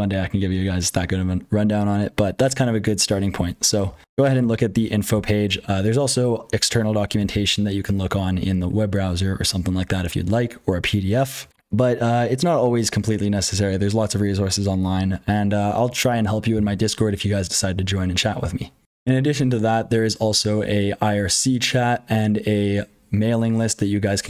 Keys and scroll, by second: 0.0-5.1 typing, 3.8 ctrl+p, 4.7 ctrl+a, 5.1 ctrl+k, 7.1 ctrl+l.